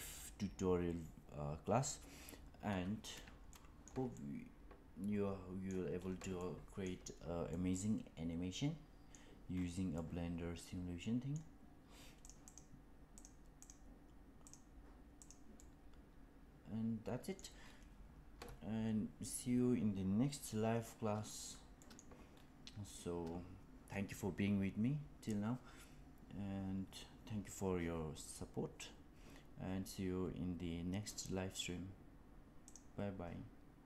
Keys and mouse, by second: 3.4-3.8 shift+middle drag, 4.0-5.6 middle drag, 6.3-6.7 middle drag, 7.4-9.0 middle drag, 9.8-11.2 middle drag, 12.5-12.9 right drag, 13.0 click, 13.6-14.4 right drag, 15.5-17.3 middle drag, 21.7 middle drag.